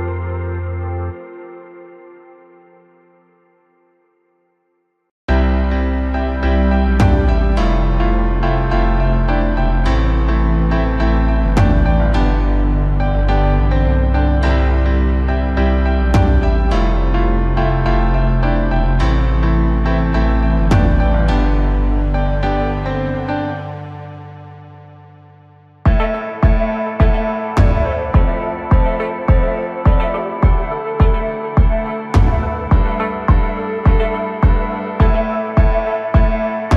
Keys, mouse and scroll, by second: 2.5-3.0 scroll up 1, 3.0 KP_1, 4.5 click, 4.9-5.3 scroll up 1, 5.3-5.8 scroll down 1, 5.8 s, 9.0-10.3 right drag, 10.3 g, 12.8 scroll down 2, 13.0-13.9 middle drag, 13.9-14.2 scroll up 2, 14.2-14.6 middle drag, 14.6-15.6 scroll up 1, 15.6 click, 16.0-17.1 middle drag, 17.1 scroll down 1, 17.3-20.0 middle drag, 20.0 KP_7, 20.8-21.3 scroll up 1, 21.3 KP_1, 22.7 click, 23.1-23.8 scroll up 1, 23.8 ctrl+KP_4, 23.9 ctrl+KP_4, 24.3 ctrl+KP_4, 24.5 ctrl+KP_2, 24.7-25.2 ctrl+KP_2, 25.8-26.2 scroll up 1, 26.2 scroll down 1, 26.4-27.5 middle drag, 27.5-27.9 scroll up 2, 27.9-29.1 middle drag, 29.1 s, 34.6-34.9 scroll down 3, 34.9-36.0 middle drag, 36.0 click, 36.3-36.7 middle drag.